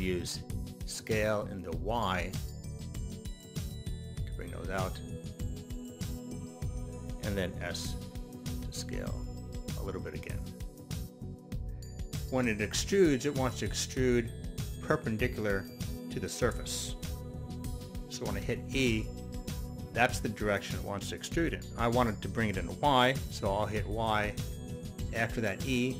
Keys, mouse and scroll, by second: 1.9 y, 1.9 s, 5.3 click, 5.7-7.1 middle drag, 8.1 s, 10.0 click, 10.0 s, 10.4-12.0 middle drag, 18.8 e, 24.5 y.